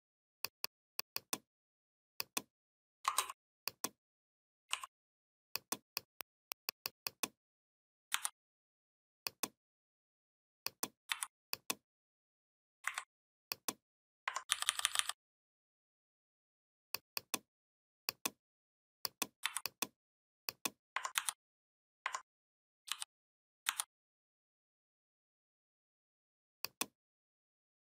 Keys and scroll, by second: 7.9 c, 10.9 v, 12.6 Delete, 14.3 ctrl+[, 19.2 v, 20.9 ctrl+c, 22.6 ctrl+f, 23.4 c.